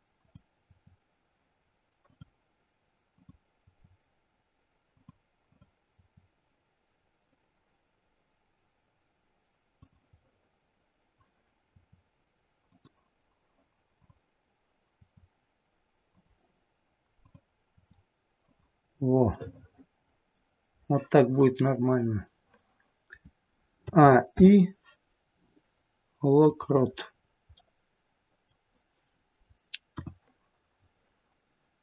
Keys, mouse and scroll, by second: 0.1 click, 0.6 r, 3.0 click, 3.6 r, 5.4 click, 5.9 r, 10.0 middle click, 11.7 r, 13.9 click, 15.0 r, 17.2 click, 17.8 r, 18.9-19.3 scroll down 3, 19.3 middle click, 23.8 a, 24.3 i, 27.1-27.5 scroll down 5, 27.5 middle click, 29.9 KP_1, 30.8-31.8 scroll down 1.